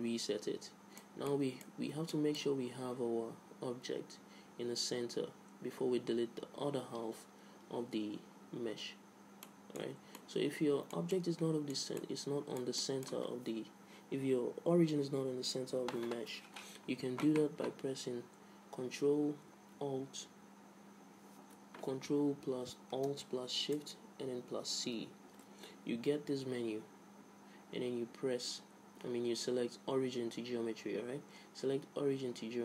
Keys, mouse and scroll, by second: 9.6-12.0 middle drag, 10.1 Tab, 25.1 ctrl+alt+shift+c.